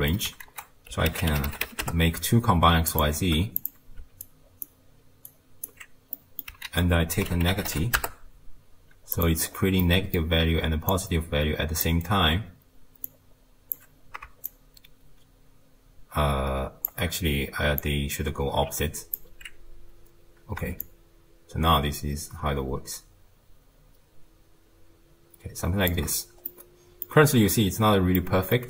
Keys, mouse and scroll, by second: 0.5 ctrl+a, 3.2 shift+d, 4.3-6.2 alt+right drag, 6.2 middle click, 6.7 ctrl+a, 9.5-9.8 scroll up 1, 9.8-10.9 middle drag, 10.9 click, 13.1 drag, 14.5-17.5 shift+drag, 17.9 drag, 20.9-24.1 shift+drag, 26.5-27.3 middle drag, 27.3-28.2 scroll down 1, 28.2-28.6 middle drag.